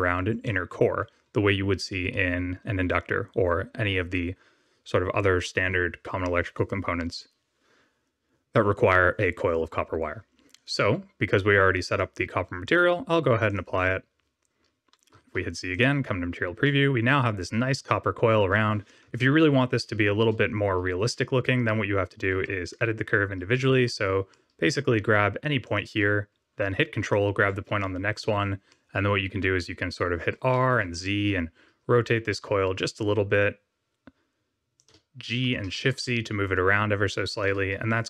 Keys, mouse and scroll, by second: 0.4 middle click, 10.5 click, 11.8 click, 12.6 click, 15.1 z, 15.7 click, 16.6 middle click, 19.0 KP_7, 19.9 scroll up 2, 20.7 scroll up 1, 21.3-22.0 scroll down 1, 22.7 Tab, 24.2 middle click, 25.6 click, 26.9 ctrl+click, 27.7 shift+middle click, 28.6 middle click, 30.1 r, 35.3 g.